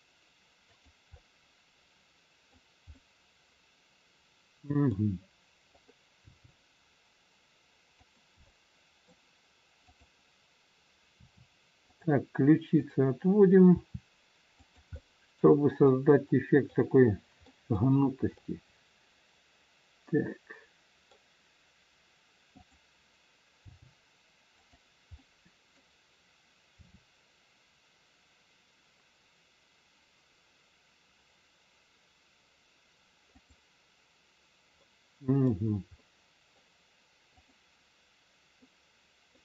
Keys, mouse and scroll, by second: 1.1 middle click, 5.6 middle click, 5.6 click, 6.5 g, 8.5 middle click, 9.9 click, 11.1 r, 12.7 click, 13.6 r, 14.9 middle click, 15.7 middle click, 17.9 middle click, 17.9-18.3 scroll down 3, 18.3 middle click, 21.5 scroll up 1, 22.5 click, 23.5 g, 25.1 middle click, 26.8 r, 34.7 middle click, 37.2 middle click, 37.2 click, 38.6 middle click.